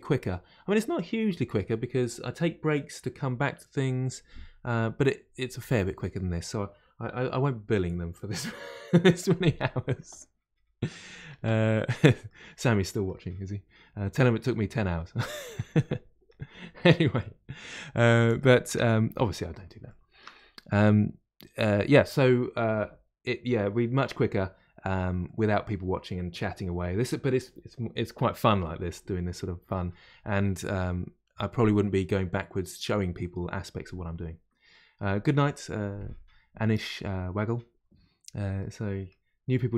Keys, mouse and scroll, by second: 12.3-15.3 middle drag, 15.4-18.7 middle drag, 18.7 Tab, 19.8-23.3 shift+middle drag, 25.2-28.3 middle drag, 38.1-38.5 scroll down 1, 38.5-39.7 middle drag.